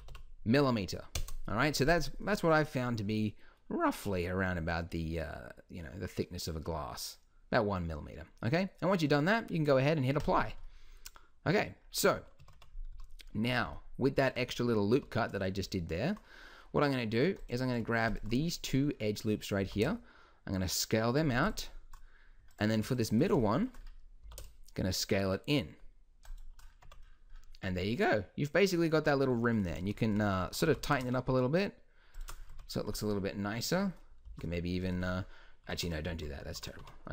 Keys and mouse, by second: 0.1 m, 2.3-3.5 drag, 8.5 middle drag, 10.2-12.6 drag, 12.4 KP_1, 12.5 Tab, 13.0 z, 15.0 z, 18.5-19.6 middle drag, 19.6 s, 23.5 middle click, 24.2 s, 26.8 Tab, 29.0 Tab, 30.6 g, 32.5 Tab, 33.7 Tab, 34.2 shift+e, 35.0 Tab, 35.7 Tab, 36.1 ctrl+z, 36.4 ctrl+z, 36.8 Tab.